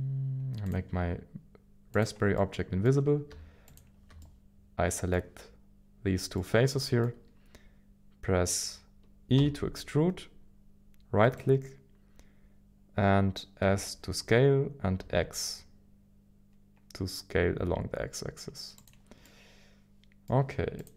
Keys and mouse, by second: 0.6 click, 2.3 middle click, 4.2 middle click, 7.0 middle click, 9.4 e, 13.6 s, 15.0 s, 15.0 x, 18.8 click, 19.2-20.3 middle drag.